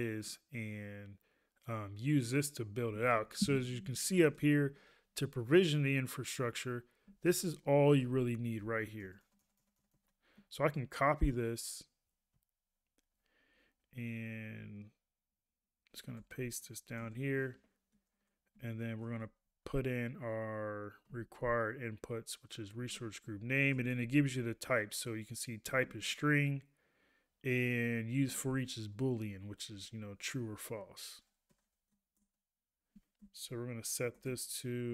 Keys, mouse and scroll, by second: 7.2 ctrl+a, 11.5 click, 12.5 ctrl+a, 18.1 ctrl+a, 19.1 ctrl+a, 22.9 ctrl+a, 25.8 ctrl+a, 28.3 ctrl+a.